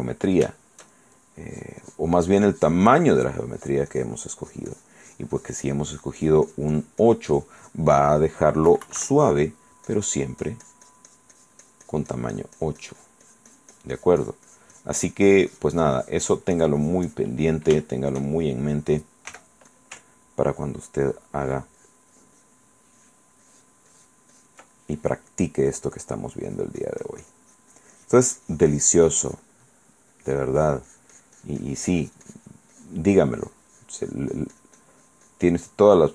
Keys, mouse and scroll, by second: 0.7 shift+middle click, 1.7-3.7 shift+drag, 3.8 click, 4.7-8.1 drag, 8.9 KP_Subtract, 9.5 click, 9.5 middle click, 10.1-17.6 drag, 18.0 shift+click, 19.5 f, 19.9 click, 20.6 ctrl+click, 21.2 ctrl+click, 23.2 ctrl+click, 23.6 ctrl+click, 24.9-26.5 ctrl+middle drag, 26.7-29.8 ctrl+drag, 29.9 middle click, 30.3-32.9 drag, 35.9 middle click.